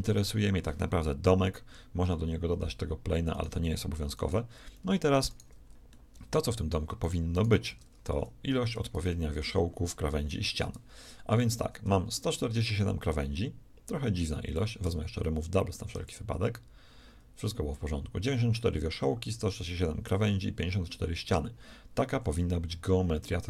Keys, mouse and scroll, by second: 1.1 KP_1, 1.5 KP_5, 1.9 KP_5, 4.7 z, 7.5 Tab, 8.1 a, 14.6 w, 21.9 a.